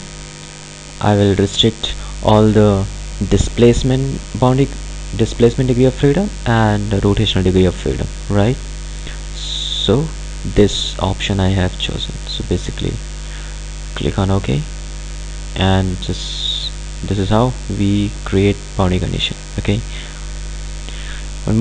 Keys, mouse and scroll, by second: 14.4 click, 17.0 click.